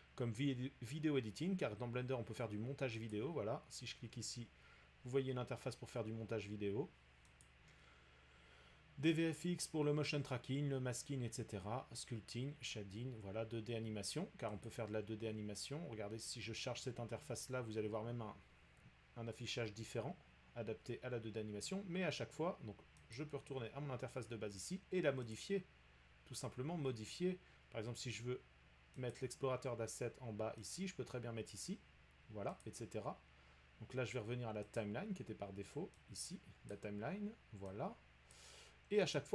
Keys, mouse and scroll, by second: 3.1 click, 7.4 click, 12.5 click, 14.7 click, 19.2-19.7 drag, 23.1 click, 25.3 click, 29.1 click, 31.5 click, 32.6 click, 34.8 click, 36.7 click, 38.3 click, 39.2 click.